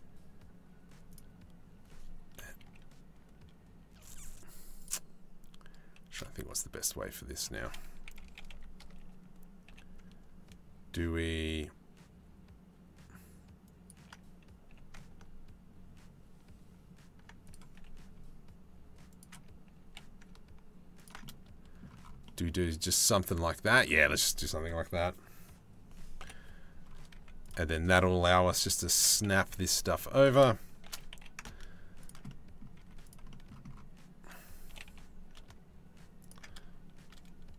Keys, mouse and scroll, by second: 2.0 KP_3, 4.4 click, 5.5 shift+d, 7.7 r, 9.2 g, 14.3 g, 17.7 ctrl+g, 19.4 g, 20.8 middle click, 21.8-23.4 middle drag, 25.8 KP_7, 26.7 z, 28.5 shift+d, 30.4 shift+d, 32.4 z, 32.9 shift+middle click, 34.3 g.